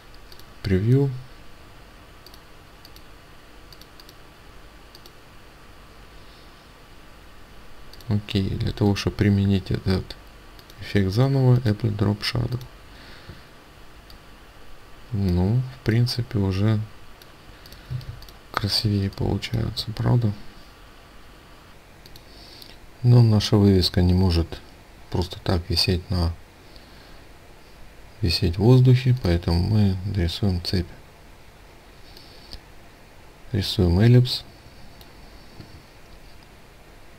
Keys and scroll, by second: 17.4 ctrl+space.